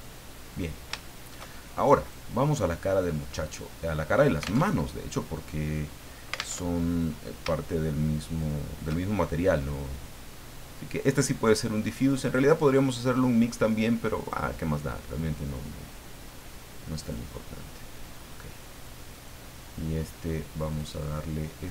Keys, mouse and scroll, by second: 1.0 shift+middle click, 2.0 shift+right click, 2.5 shift+middle click, 3.2-3.5 scroll up 2, 4.6 alt+Tab, 6.5 alt+Tab, 7.6 shift+right click, 8.4 shift+right click, 9.6 click, 12.1 click, 14.2 click, 15.2-17.3 drag, 19.1 right click, 20.7 click.